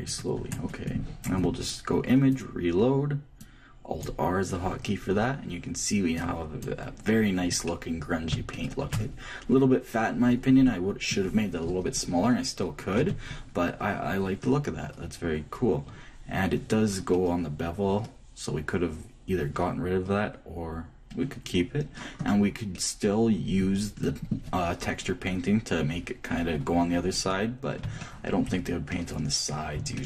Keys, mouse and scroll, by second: 2.0-4.0 drag, 6.0-7.8 drag, 7.4-11.2 middle drag, 8.0 Left, 12.7 Tab, 14.1 middle click, 15.1-18.6 middle drag, 21.8-23.7 middle drag, 27.5 Left, 29.0-30.0 middle drag.